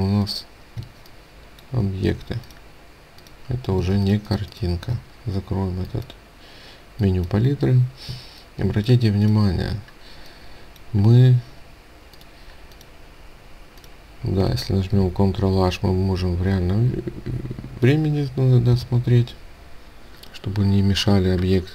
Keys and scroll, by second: 0.8 ctrl+space, 4.0 ctrl+space, 14.9 ctrl+h, 18.7 ctrl+h.